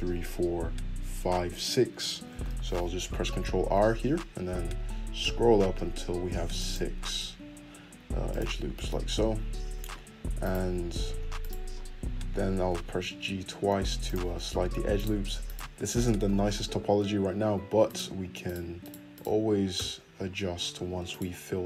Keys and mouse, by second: 3.0 ctrl+r, 9.0-10.4 middle drag, 10.4 alt+click, 10.5 middle click, 11.4 click, 11.5-15.0 middle drag, 12.6 g, 14.7 1, 15.0 shift+click, 15.5-17.8 middle drag, 16.2 f, 17.8 click, 17.9 shift+middle click, 18.4 shift+click, 18.5 shift+middle click, 18.8 shift+click, 19.7 f, 21.1 click.